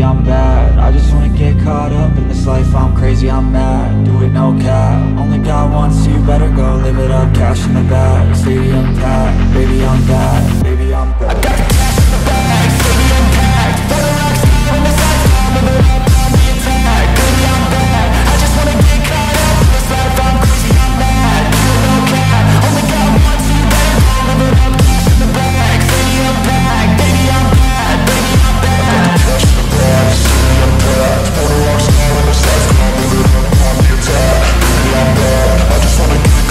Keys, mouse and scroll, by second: 0.3-0.7 scroll down 1, 0.7 alt+click, 1.3-3.8 scroll up 1, 3.9 alt+click, 4.6 scroll down 1, 4.9 alt+click, 7.2 scroll up 1, 7.5 alt+middle click, 7.8 scroll down 1, 7.9 scroll up 1, 8.0 alt+click, 9.1 scroll down 1, 9.3 alt+middle click, 9.7 scroll up 1, 10.4 right click, 13.4 scroll down 1, 13.5 alt+middle click, 14.3 right click, 15.4 scroll down 1, 15.6 alt+click, 16.0 alt+middle click, 19.3 alt+click, 20.2 alt+click, 21.0-21.3 scroll down 1, 21.5 alt+click, 22.5 alt+click, 23.7 alt+click, 24.5 scroll up 1, 24.7 alt+click, 25.0 alt+middle click, 25.1 scroll up 2, 25.4 alt+click, 26.9-27.7 scroll up 1, 27.7-29.0 scroll down 1, 29.0 alt+middle click, 29.7 scroll up 1, 30.7 ctrl+z, 31.0 shift+click, 31.9 typing, 32.2 Return, 33.3-34.1 typing, 35.9 scroll up 1.